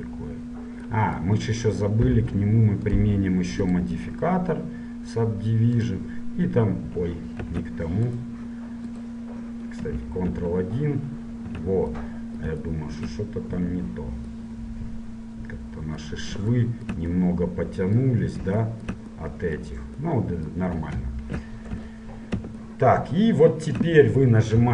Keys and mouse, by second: 3.1-6.1 drag, 7.7 ctrl+z, 8.3 click, 10.7 ctrl+1, 11.9 ctrl+2, 15.9 middle click, 16.8 click, 17.6-20.2 middle drag, 21.9 KP_1.